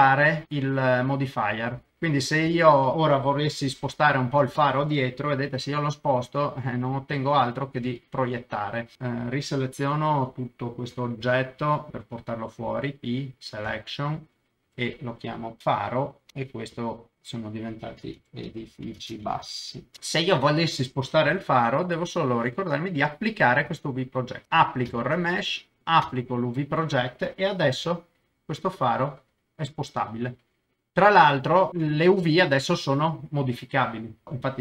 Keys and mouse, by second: 1.7 middle click, 2.5 middle click, 2.9 KP_0, 5.4 g, 5.5 middle click, 7.8 Escape, 8.4 middle click, 8.9 Tab, 8.9 alt+a, 8.9 l, 11.2 l, 11.9 p, 13.7 Tab, 14.6 F2, 16.7 click, 17.1 F2, 19.6 s, 20.0 middle click, 21.3 g, 21.3 middle click, 21.9 Escape, 24.4 ctrl+z, 24.9 ctrl+a, 26.0 ctrl+a, 27.7 g, 27.8 middle click, 28.2 middle click, 30.9 Escape, 31.0 middle click, 31.9 shift+click.